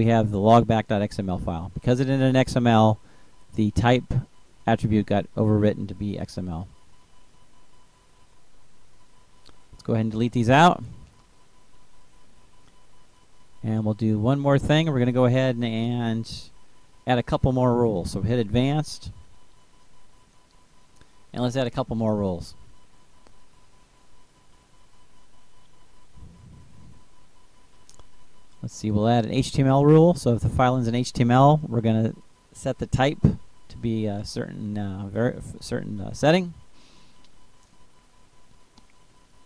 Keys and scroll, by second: 5.8 shift+Down, 6.8 Delete, 24.1-26.5 typing, 31.5-34.3 typing, 35.6-37.6 typing, 39.0 ctrl+space.